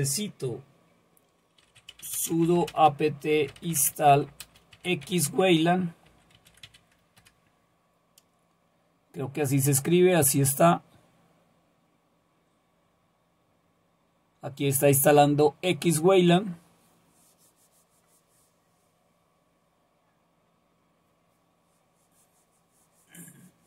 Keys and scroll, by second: 1.4-7.1 typing, 7.2 Return.